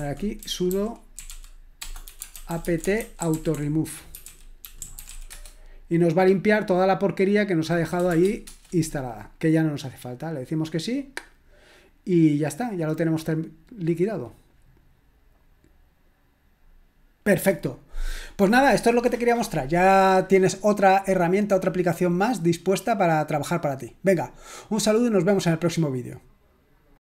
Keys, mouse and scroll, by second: 0.0-5.5 typing, 8.1 s, 8.5 Return.